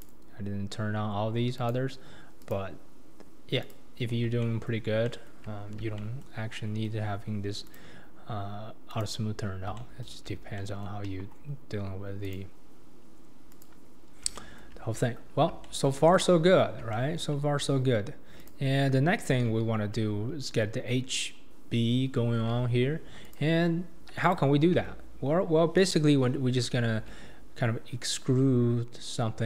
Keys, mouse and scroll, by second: 1.6 click, 2.4 click, 3.6 click, 4.1-4.4 scroll down 4, 4.4-5.8 shift+middle drag, 5.8 scroll down 2, 6.0-6.5 shift+middle drag, 6.5 scroll up 1, 6.6-7.1 shift+middle drag, 7.1-7.7 scroll up 4, 7.7 click, 8.9 click, 9.4-9.8 scroll down 2, 9.8-11.0 middle drag, 11.0 KP_1, 11.5-12.2 scroll down 1, 12.2 click, 13.5 click, 14.0-14.4 scroll down 2, 14.4-15.0 shift+middle drag, 15.0-15.4 scroll up 2, 15.4 scroll down 2, 15.6-16.1 shift+middle drag, 16.1 click, 16.5-16.9 scroll up 4, 16.9-17.5 shift+middle drag, 17.5-18.4 scroll up 3, 18.4 click, 18.9-19.5 scroll up 3, 19.5 alt+z, 22.4 alt+z, 23.2 click, 23.5 Tab, 24.2 click, 24.7 Tab, 27.0 alt+z.